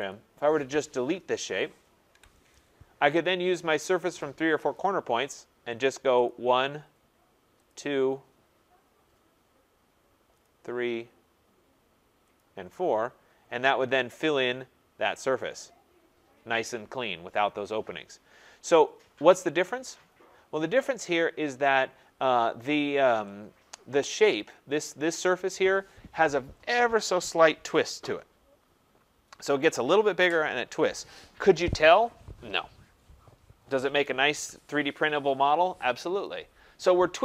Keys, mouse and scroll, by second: 0.1 click, 2.1 Delete, 4.7 click, 6.2 click, 7.7 click, 8.0 scroll, 8.8 scroll, 10.4 click, 10.8-12.3 scroll, 12.3 click, 13.0 scroll, 13.0 middle click, 13.1 middle click, 13.4 middle click, 14.0 middle click, 14.1 middle click, 14.2 middle click, 14.2 middle click, 14.4 middle click, 15.4 click, 17.9 scroll, 18.8-19.3 scroll, 21.7 click, 24.3 click.